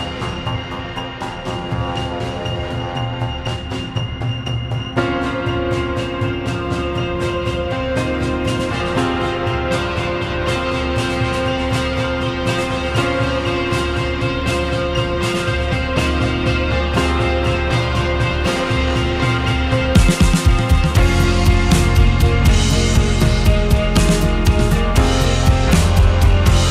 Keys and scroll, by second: 18.2 ctrl+z, 18.6 ctrl+z.